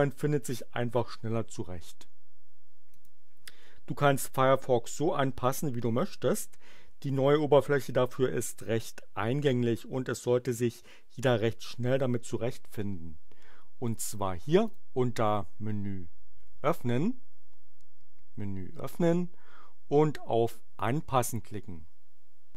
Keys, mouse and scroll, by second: 2.8 click, 14.6 click, 20.7 click.